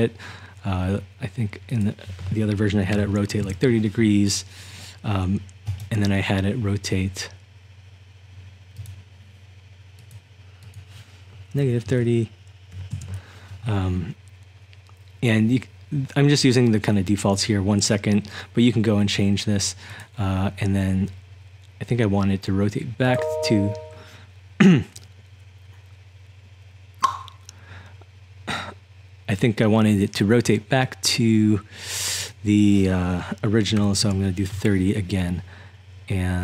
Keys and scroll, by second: 2.9 typing, 3.5 Return, 11.6-13.3 typing, 33.5-34.3 typing.